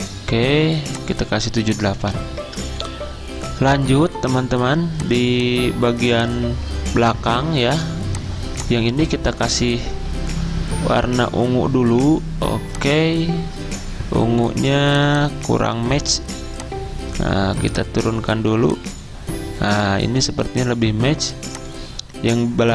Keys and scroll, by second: 2.4 Return, 5.0 Return.